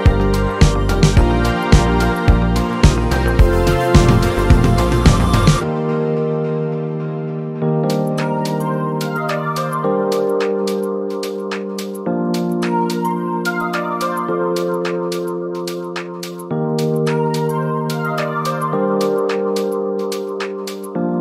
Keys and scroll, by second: 19.2 typing.